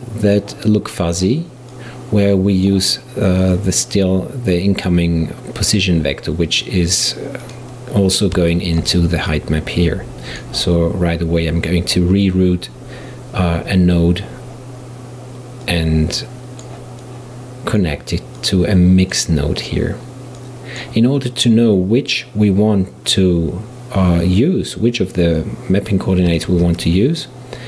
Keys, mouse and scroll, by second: 1.8 click, 7.5 click, 8.6-9.3 shift+right drag, 9.3-12.4 drag, 15.7 click, 17.1-18.4 drag, 18.4 click, 20.4-23.4 drag, 26.5 shift+a.